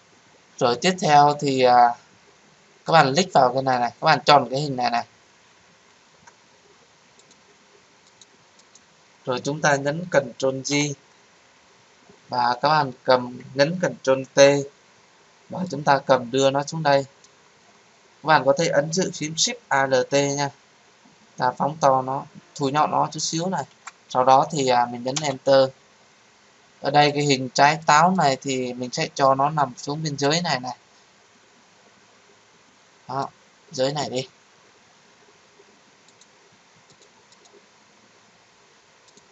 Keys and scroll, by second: 5.9 ctrl+z, 10.7 ctrl+j, 14.2 ctrl+t, 25.1 Return.